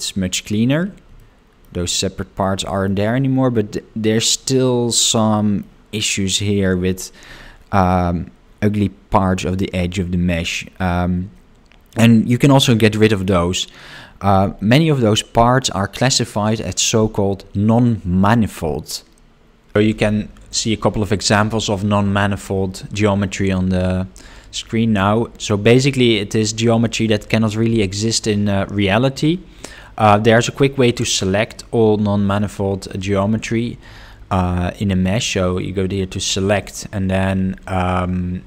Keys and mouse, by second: 1.2 shift+middle click, 1.9 middle click, 2.7 shift+middle click, 5.0 middle click, 8.7 middle click, 10.0 shift+middle click, 10.6-13.2 middle drag, 35.0-38.4 drag.